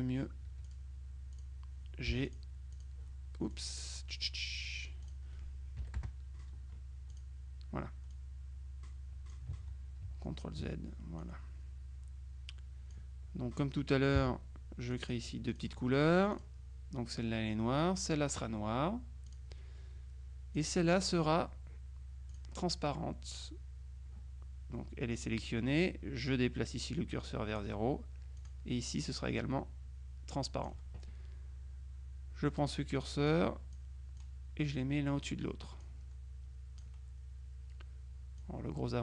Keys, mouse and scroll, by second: 0.6 F2, 0.7 click, 1.4 click, 2.2 g, 2.3 click, 3.6 click, 5.9 KP_Subtract, 6.1 KP_Add, 7.2 click, 8.2-9.9 drag, 9.7 ctrl+z, 11.3-13.5 drag, 14.2 g, 15.0 click, 16.4 click, 18.0 click, 19.4 click, 20.6 click, 22.4 click, 25.3 click, 26.4-28.2 drag, 28.5 click, 29.5-31.2 drag, 33.4 click, 35.9-37.4 drag, 38.5 click.